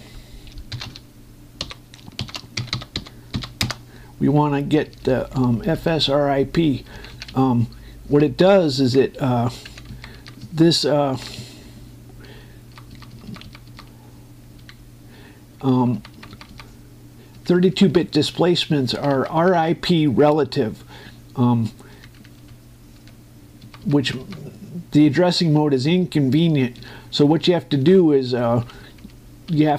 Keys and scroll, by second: 1.3-3.3 typing, 4.4 Return, 5.6 Up, 7.6 Down, 8.0 Right, 10.4 Down, 10.6 Right, 10.9 Up, 11.1 Right, 11.9 Up, 12.1 Right, 15.4 Left, 16.5 Right, 18.1 Left, 19.6 Right, 22.6 Left, 24.4 Right, 26.3 Left, 27.5 Up, 28.0 Left.